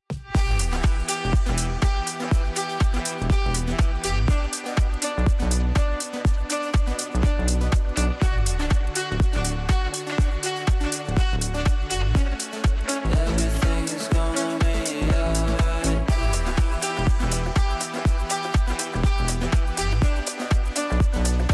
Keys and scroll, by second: 16.4 shift+F2.